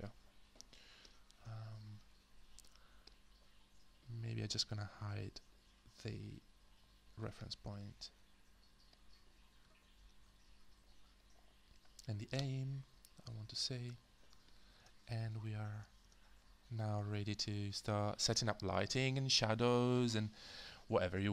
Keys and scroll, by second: 1.3 space, 7.7 h, 9.6 h, 10.2 h, 12.4 h, 14.8 space, 16.0 space.